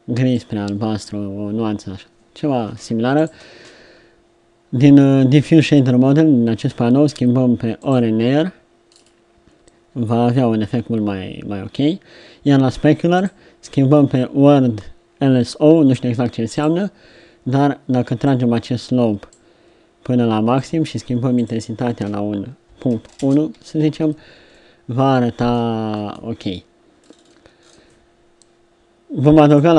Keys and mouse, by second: 24.5-25.8 middle drag, 29.7 middle click.